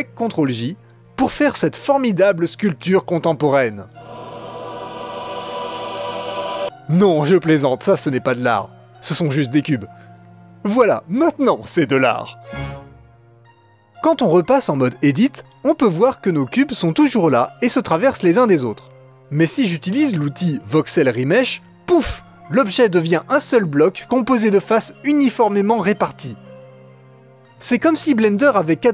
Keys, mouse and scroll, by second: 1.0-3.5 middle drag, 7.0-9.7 drag, 9.7 ctrl+z, 9.8-12.6 drag, 15.5-17.0 drag, 17.5 click, 17.9 l, 18.4 g, 21.0-23.7 drag, 24.0-25.0 drag, 25.0 middle click, 25.2 KP_Add, 25.4 KP_Add, 25.5 KP_Add, 25.6-27.1 middle drag, 27.5-28.9 middle drag.